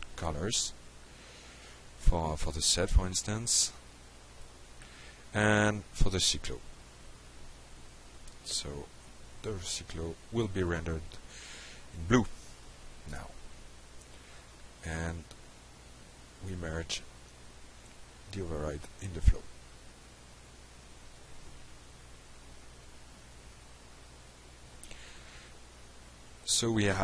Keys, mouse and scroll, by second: 0.0 click, 1.1 click, 2.1 click, 3.0 shift+0, 3.3 Tab, 4.0 shift+1, 4.2 Return, 5.0 Escape, 5.9-6.7 shift+drag, 7.1-7.6 drag, 7.9-8.4 drag, 8.8 ctrl+c, 9.1 click, 9.4 ctrl+v, 10.2-10.5 alt+middle drag, 11.2-12.2 shift+drag, 12.7-13.1 drag, 14.0 click, 15.2 click, 16.1 click, 17.0 shift+0, 17.8 Return, 19.7 Escape, 20.6-21.4 shift+drag, 22.0 click, 22.9 click, 24.4 middle click, 26.6 middle click.